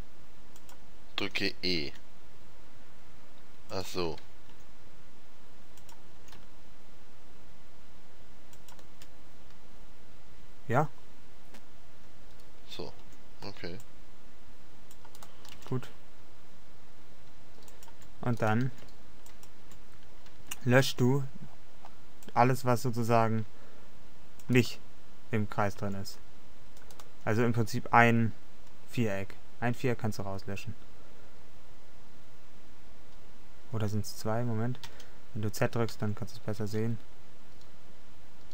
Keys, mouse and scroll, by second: 1.5 s, 4.6 s, 4.7 s, 6.4 g, 10.1 middle click, 13.1 a, 13.6 c, 15.6 g, 18.6 right click, 18.8 g, 20.7 a, 21.0 c, 24.7-26.7 middle drag, 26.0 c, 34.9 z, 36.0 c.